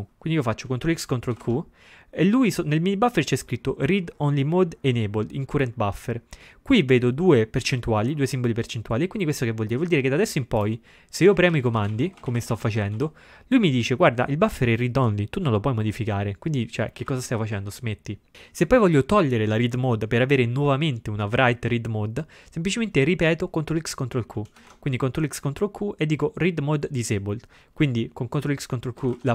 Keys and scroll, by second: 1.3 ctrl+x, 1.4 ctrl+q, 11.4-13.0 typing, 16.8-18.1 typing, 24.6 ctrl+x, 24.7 ctrl+q, 29.1 ctrl+x, 29.1 ctrl+q.